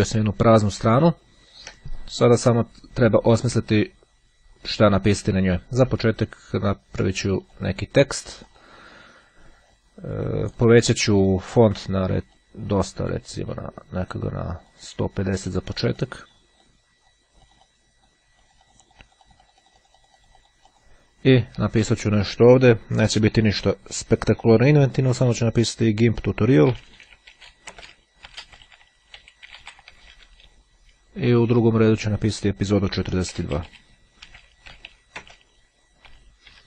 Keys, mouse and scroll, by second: 1.1-1.6 ctrl+scroll up 2, 7.2-8.2 drag, 8.3 click, 10.6 click, 12.4-14.0 drag, 14.1-15.1 drag, 15.1-16.7 drag, 16.7-17.7 drag, 18.5-21.5 drag, 21.8 click, 25.3 shift+g, 26.9-30.8 typing, 33.2-36.2 typing.